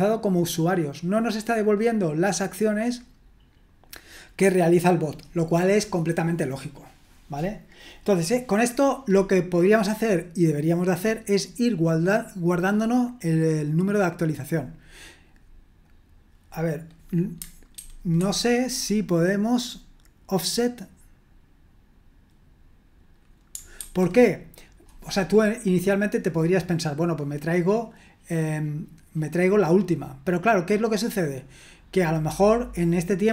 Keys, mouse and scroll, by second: 17.7 super+1, 18.2 super+2, 23.9 super+1.